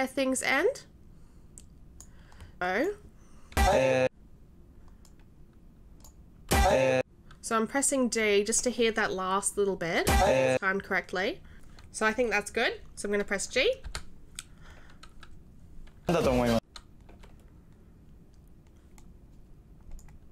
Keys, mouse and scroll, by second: 2.6 right click, 3.5 d, 5.0 right click, 6.2 right click, 6.4 d, 10.0 d, 13.8 g, 16.0 d, 20.0-20.3 right drag.